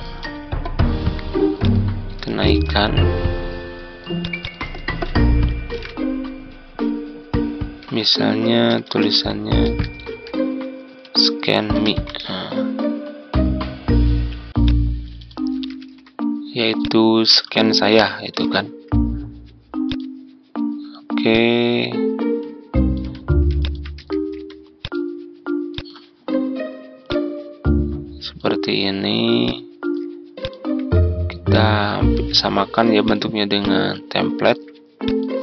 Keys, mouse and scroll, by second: 2.4 ctrl+d, 2.9-4.7 drag, 4.8 ctrl+a, 5.6 shift+s, 7.7-12.5 typing, 14.6 click, 15.7 shift+s, 16.7 click, 17.8 BackSpace, 18.2 shift+m, 19.8-22.9 drag, 23.5 shift+click, 24.2 typing, 30.3-32.7 shift+drag, 33.0 click.